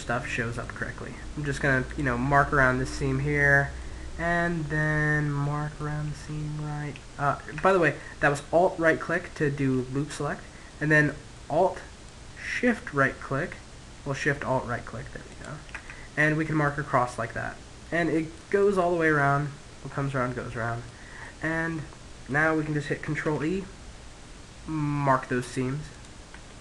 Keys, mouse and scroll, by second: 0.9 right click, 2.9 middle click, 3.5-6.3 middle drag, 7.1-8.8 middle drag, 9.0-12.1 middle drag, 14.4 right click, 15.1 middle click, 15.3 right click, 16.3-19.5 middle drag, 20.3-22.0 middle drag, 22.4 ctrl+e, 25.6-26.6 middle drag.